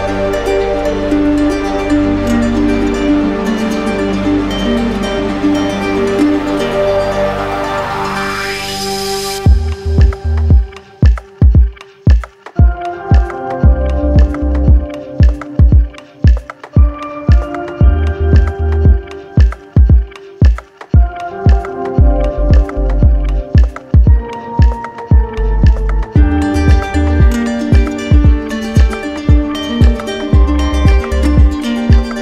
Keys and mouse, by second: 1.6-2.7 drag, 4.1-5.1 drag, 5.1 right click, 8.2 ctrl+click, 8.6 ctrl+click, 9.3 w, 12.2 click, 13.8 right click, 14.4 w, 18.4 click, 19.7 right click, 22.3 right click, 26.9 click, 28.5 click, 29.8-31.7 right drag.